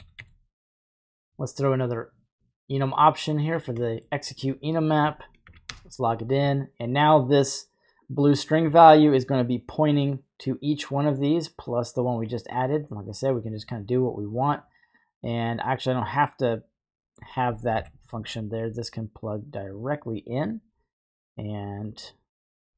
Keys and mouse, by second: 0.2 y, 1.0 click, 2.3-3.6 drag, 3.9 middle click, 4.9 ctrl+click, 8.0-12.5 drag, 13.2 middle drag, 14.9 click, 15.1-15.8 drag, 17.1 click, 17.8 typing, 18.8-20.5 drag, 21.9 click.